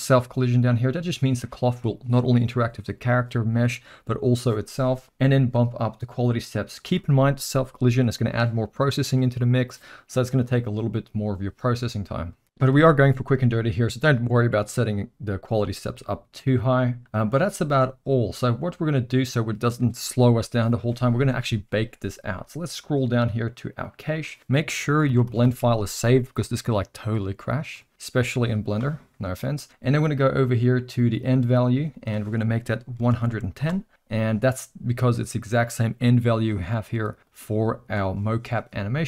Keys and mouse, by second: 1.2 click, 6.3 click, 6.5 click, 23.8 click, 24.4 middle click, 25.0 ctrl+s, 25.2 ctrl+s, 25.4 ctrl+s, 32.0-33.9 drag, 33.0 1, 37.4 click.